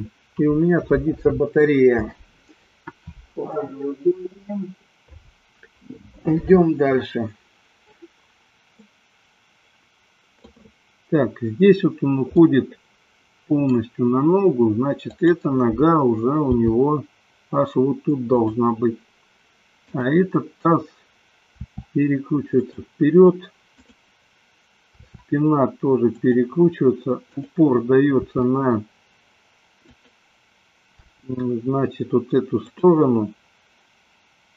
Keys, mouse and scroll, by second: 8.8-10.4 middle drag, 12.4-13.7 middle drag, 15.0 click, 16.3 g, 18.5 click, 19.9 click, 21.7 r, 25.2 r, 26.3 click, 28.3 r, 30.0 click, 30.9 g.